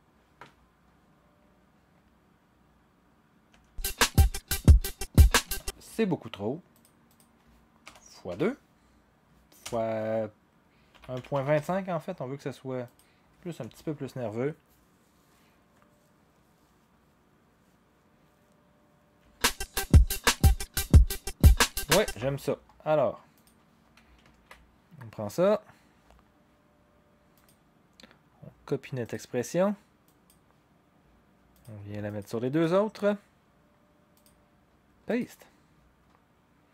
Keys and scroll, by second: 3.5 0, 5.4 0, 7.8-8.2 typing, 9.6 BackSpace, 10.7-12.0 typing, 13.6 0, 19.2 0, 22.0 0, 24.3 ctrl+c.